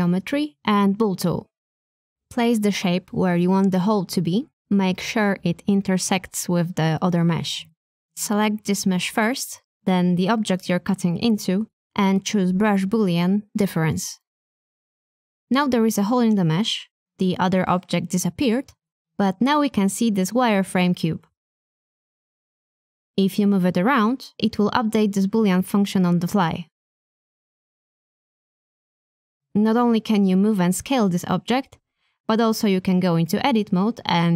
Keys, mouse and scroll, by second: 1.8 shift+middle click, 8.6 shift+click, 16.9 click, 19.4-20.8 middle drag, 22.3 shift+middle click, 23.2 click, 24.8 g, 27.8 s, 30.0-33.7 middle drag.